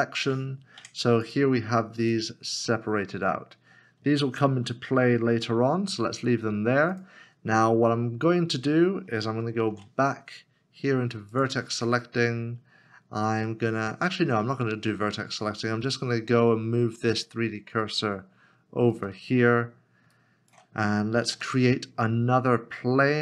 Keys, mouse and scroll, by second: 0.8 Tab, 2.9 Tab, 3.1-3.9 scroll down 1, 9.1 ctrl+s, 9.5 ctrl+shift+Tab, 17.8 shift+right click, 20.1 shift+right click, 21.2 shift+a.